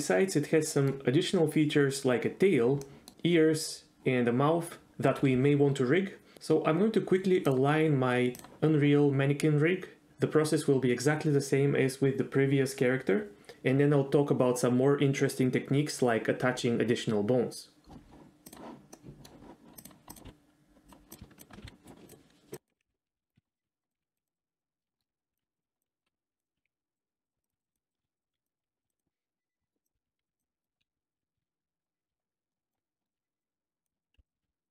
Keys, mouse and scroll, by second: 0.0-0.9 middle drag, 2.8 middle drag, 18.9-19.3 middle drag, 19.8 click, 20.1 click, 20.2 s, 21.4 shift+click, 21.6-28.9 typing, 21.8 right click, 22.1 click, 22.6 click, 23.4 click, 23.9 click, 25.3 click, 25.7 click, 26.0 click, 26.5 ctrl+z, 26.6 ctrl+z, 27.4 click, 27.6 click, 28.3 click, 28.7 right click, 29.5 middle click, 29.8 click, 29.9-34.7 typing, 30.4 click, 30.6 click, 31.1 click, 31.8 click, 32.5 shift+middle click, 32.9 click, 33.0 shift+middle click, 33.1 click, 33.4 click, 33.6 middle click, 34.0 click, 34.4 ctrl+z.